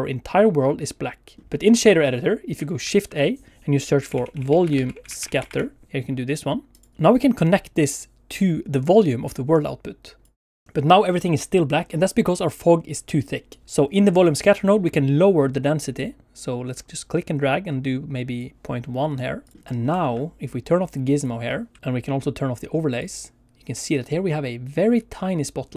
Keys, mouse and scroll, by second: 1.4 shift+a, 2.8 shift+a, 5.3 t, 6.9 click, 7.8 click, 13.6 click, 15.5 click, 18.7 click, 19.3 middle click, 19.7 scroll up 1, 20.0 shift+middle click, 21.1 click, 21.8 shift+middle click, 23.0 click.